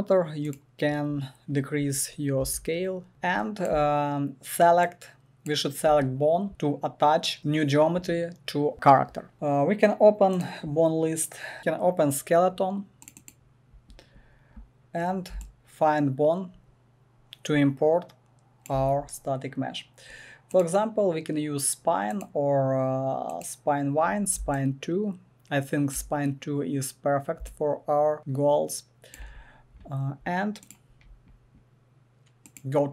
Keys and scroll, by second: 2.4 KP_Decimal.